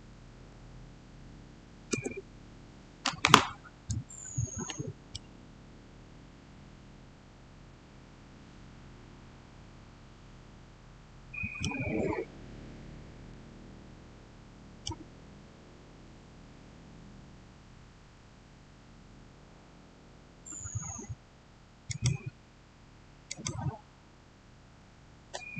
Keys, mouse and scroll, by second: 0.2 Return, 4.5 shift+Return, 5.0-11.9 shift+middle drag, 11.9 shift+scroll up 1, 21.7 click.